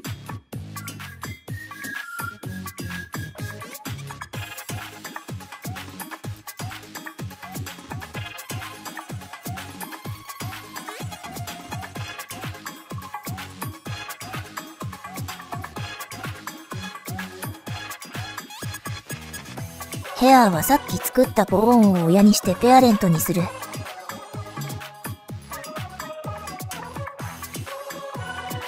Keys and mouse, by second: 0.0 click, 0.4 click, 2.3-3.4 drag, 4.0 KP_1, 4.6 KP_1, 4.7 KP_3, 5.2 middle click, 5.5 KP_3, 6.8 middle click, 7.1 KP_3, 7.4 middle click, 8.0 KP_3, 8.9 middle click, 9.6 KP_3, 10.0 click, 10.5 KP_1, 10.7 KP_3, 11.1 click, 11.3 click, 11.6 click, 11.9 KP_3, 13.3 middle click, 13.8 shift+click, 14.2 KP_3, 14.4-15.5 right drag, 16.0 ctrl+z, 16.1 click, 17.3 middle click, 17.9 KP_1, 18.1 KP_3, 18.2 KP_1, 18.5 shift+click, 19.2 click, 24.0 middle click, 24.7 middle click, 25.2 KP_3, 25.4 KP_1, 26.1 click, 26.4 click, 28.3 click.